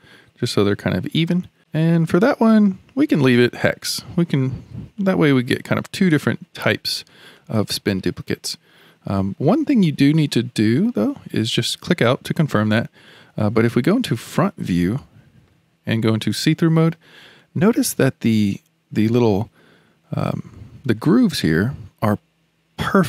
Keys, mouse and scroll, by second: 0.5 scroll down 2, 1.2-11.1 middle drag, 11.8 click, 13.1 click, 14.1 KP_1, 14.9-16.1 shift+middle drag, 16.1 alt+z, 16.6-17.1 scroll up 7, 17.4-20.5 shift+middle drag.